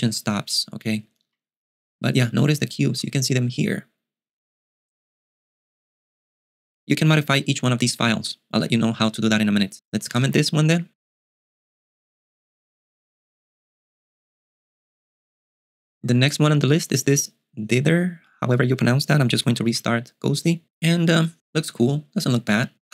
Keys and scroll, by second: 1.4 super+Tab, 10.0 g, 19.9 super+q.